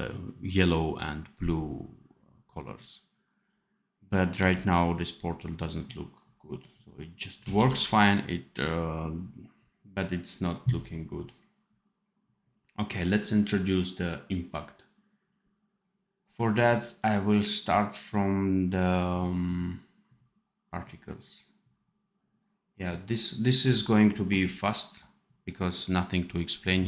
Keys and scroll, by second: 4.3 d, 7.5 ctrl+s.